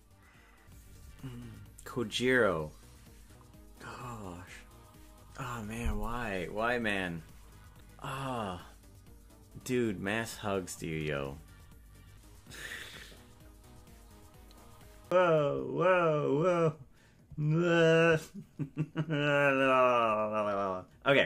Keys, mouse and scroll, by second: 15.1-21.2 drag.